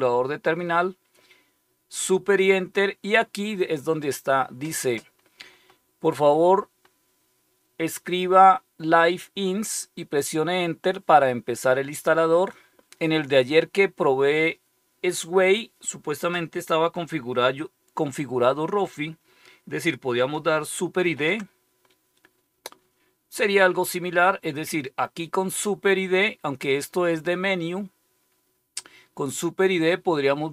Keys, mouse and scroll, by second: 20.9 super+d.